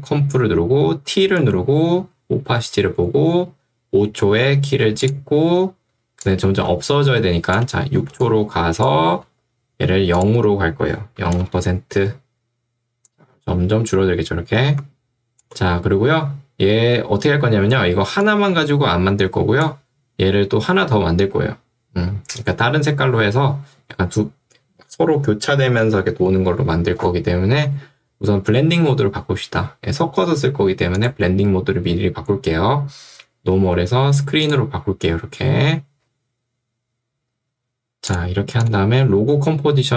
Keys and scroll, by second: 1.4 t, 8.2 ctrl+2, 9.3 Escape, 11.3 Return.